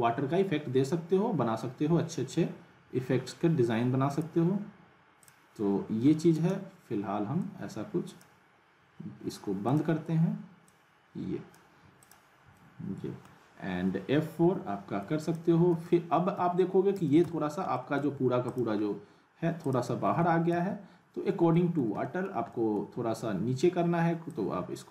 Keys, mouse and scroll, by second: 4.1 click, 6.3 space, 7.4-8.3 drag, 12.5-13.6 middle drag, 14.4 F4, 15.2 click, 17.7 alt+middle click, 18.1 w, 18.5 click, 18.8-19.6 scroll up 1, 19.6 click, 20.0-21.1 typing, 21.5 middle click, 21.9 alt+scroll up 1, 24.3-24.9 drag.